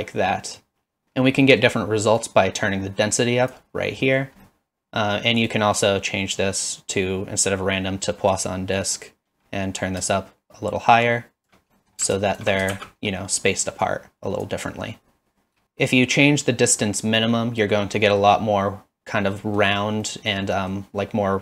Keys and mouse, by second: 1.5 middle click, 2.2-3.5 drag, 4.5 middle click, 5.5-8.4 drag, 10.1-11.5 shift+drag, 12.3 alt+shift+click, 12.7 shift+z, 13.9 click, 17.2-17.7 middle drag, 18.0 middle drag, 19.4 middle drag, 20.0 middle drag, 20.6 middle drag.